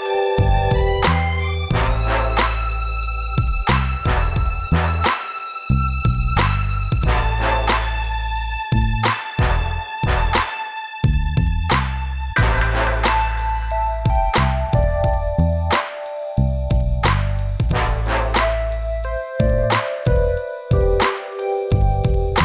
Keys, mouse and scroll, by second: 0.3 click, 1.3 click, 2.6 middle click, 3.9 click, 5.2 scroll down 2, 6.1 scroll up 2, 6.8 click, 8.1 scroll down 2, 9.4 click, 10.1 click, 10.4 click, 11.3 click, 12.3 click, 13.1 click, 14.2 click, 14.3 click, 15.0 click, 16.0 click, 19.4 click, 20.8 click, 21.5 click, 21.9 scroll down 2.